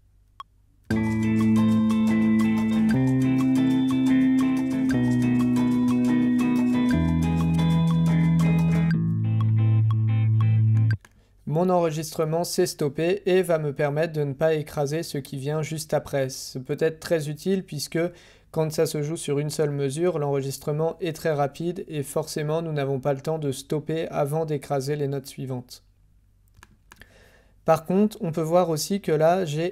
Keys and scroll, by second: 0.8 h, 2.8 k, 4.8 j, 6.8 d.